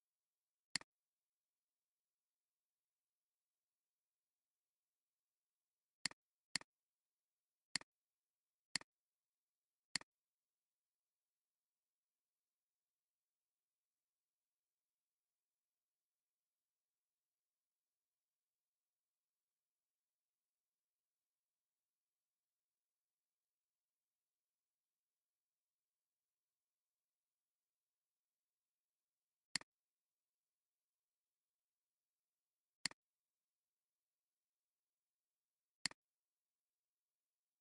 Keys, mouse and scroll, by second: 0.6 alt+click, 6.3 space, 7.3 alt+scroll up 2, 7.7-10.4 typing, 8.2 alt+scroll up 1, 9.4 alt+scroll down 2, 26.7 click, 27.5-29.0 drag, 31.8 ctrl+2, 35.8 alt+click.